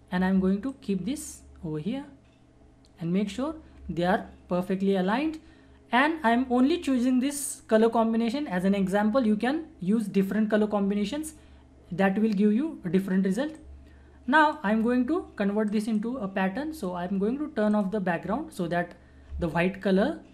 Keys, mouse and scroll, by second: 1.0-4.0 alt+drag, 13.5-15.7 drag.